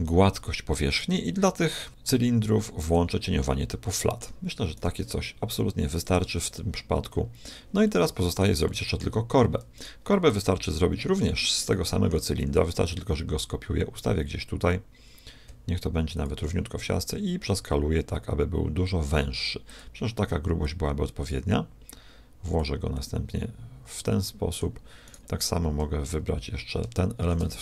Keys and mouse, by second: 2.8 click, 3.6-4.6 middle drag, 6.0 middle click, 7.0 click, 7.8-9.9 middle drag, 9.9 click, 10.6 KP_1, 11.4 right click, 11.7-13.2 middle drag, 12.4 shift+d, 16.8 s, 20.6-22.4 drag, 23.0-24.9 middle drag, 25.0-26.8 right drag, 25.9 KP_1, 27.2 shift+d.